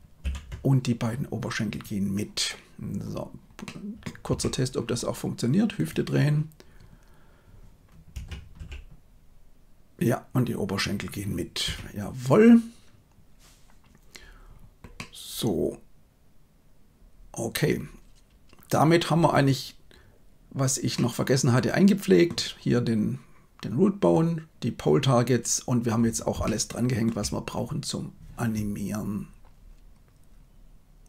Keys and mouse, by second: 0.2 ctrl+p, 3.6 middle click, 4.3 Tab, 5.7 right click, 8.1 r, 14.9-19.4 middle drag, 20.9-22.3 middle drag, 26.5 shift+middle click.